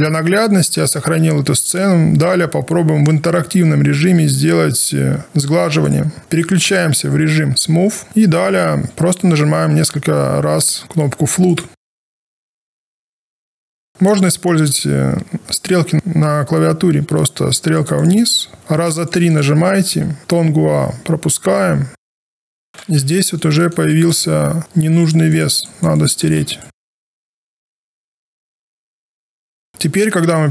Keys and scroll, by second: 15.9 Down, 18.6 Up, 19.8 Down, 27.1 Down.